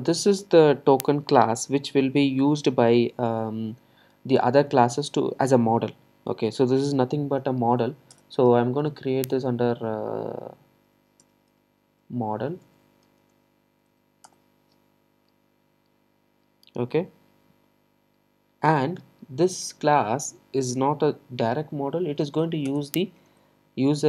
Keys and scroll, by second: 22.7 Return.